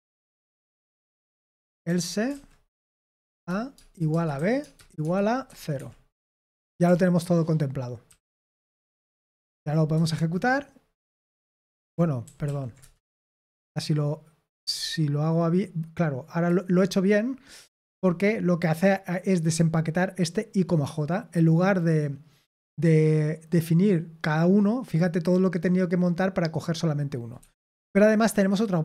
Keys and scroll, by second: 1.6-2.3 typing, 2.6 Return, 3.5-5.4 typing, 5.7 Escape, 8.3-9.4 typing, 9.5 ctrl+p, 9.9 Return, 12.2 ctrl+p, 12.8 Return, 13.4-14.7 typing, 27.3 Escape, 28.4-28.8 typing.